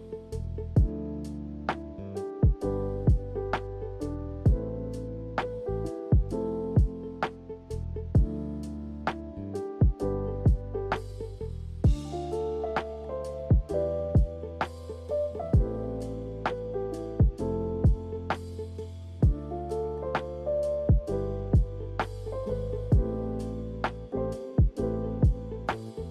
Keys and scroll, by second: 2.4 Delete, 10.2 k, 15.3 z, 18.3 k.